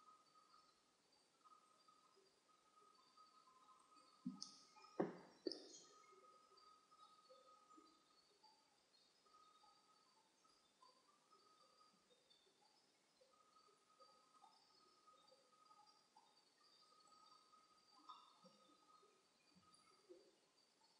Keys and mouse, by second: 1.0-3.9 middle drag, 3.9-5.3 right drag, 5.3 shift+h, 9.4-11.6 drag, 13.5 ctrl+z, 14.4-16.2 right drag, 16.2-17.8 drag, 17.8-20.2 middle drag, 19.5 g.